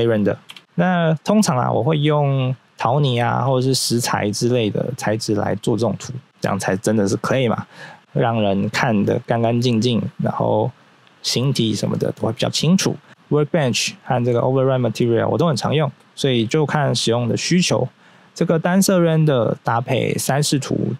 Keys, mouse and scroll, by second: 0.4 0, 1.8-3.0 scroll up 1, 6.2-6.7 scroll down 1, 9.0 scroll up 1, 18.2 scroll down 1.